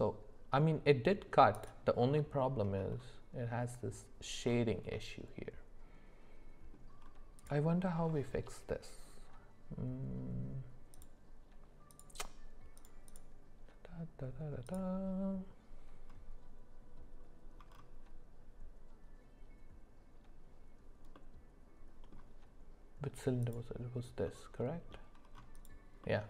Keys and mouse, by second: 1.5 click, 2.0 middle click, 4.9-6.7 middle drag, 10.9 click, 12.0 click, 13.2-14.8 drag, 21.1 middle click, 23.4 click, 24.2 middle click, 25.6 click, 26.0 middle click.